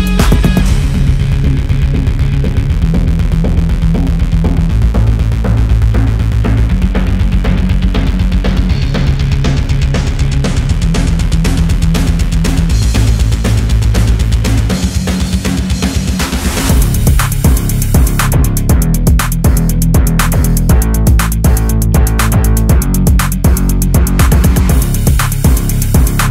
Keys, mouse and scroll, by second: 9.6-10.6 drag, 13.5-15.4 typing, 16.8-17.5 drag, 20.5-22.1 scroll up 1, 22.1-26.3 drag.